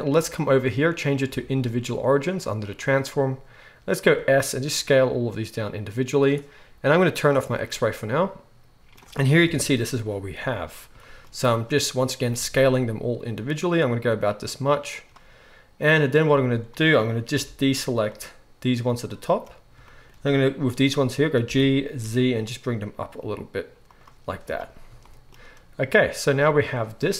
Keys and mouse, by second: 4.0 s, 6.2-7.3 middle drag, 7.3-15.0 drag, 9.4 KP_1, 12.2 s, 15.0-27.1 middle drag, 16.2 z, 17.3 b, 21.4 g, 24.2 z.